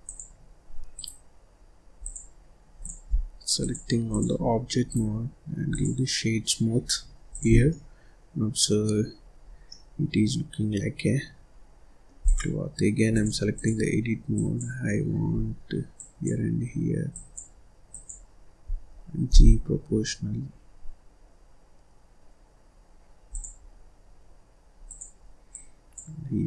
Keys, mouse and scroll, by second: 0.8-1.9 right drag, 1.9 click, 2.7 click, 3.4-4.7 drag, 4.7-7.2 right drag, 7.2 click, 7.5-9.1 middle drag, 9.1 scroll up 3, 9.4 scroll down 3, 9.6-12.1 middle drag, 12.1 click, 13.0-14.2 drag, 15.8 shift+click, 17.0 shift+click, 17.8 shift+click, 19.2 g, 24.8 click, 25.4 click.